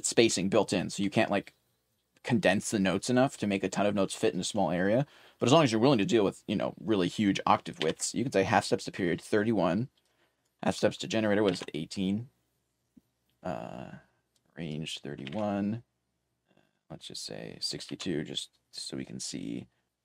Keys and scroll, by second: 7.6-10.8 typing, 12.9-14.4 typing, 17.5-20.0 typing.